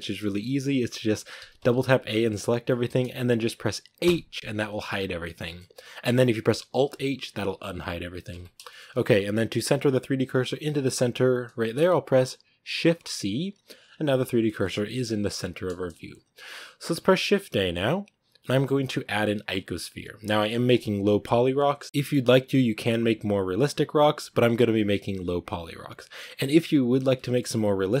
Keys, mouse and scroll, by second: 0.1-1.3 scroll up 1, 1.3 a, 1.5 a, 2.6-3.9 middle drag, 3.9 h, 5.2-6.6 middle drag, 6.6 alt+h, 8.2 ctrl+z, 8.6-8.9 shift+middle drag, 8.9-10.5 scroll up 1, 12.7 shift+c, 13.5-14.3 scroll up 6, 14.3-16.3 shift+middle drag, 16.3-16.7 scroll up 1, 27.1-28.0 middle drag.